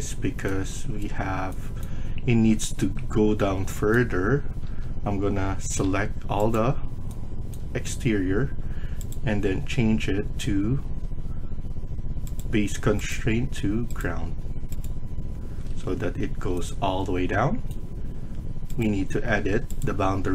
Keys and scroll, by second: 3.3 Escape, 4.5 Escape, 5.7 Tab, 10.5 Tab, 10.8 Escape, 15.4 Escape, 15.6 Escape.